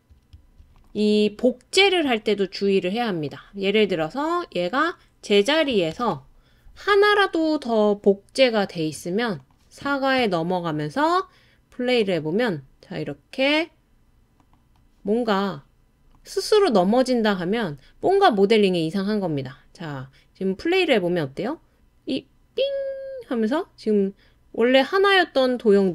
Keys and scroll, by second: 5.9 super+d.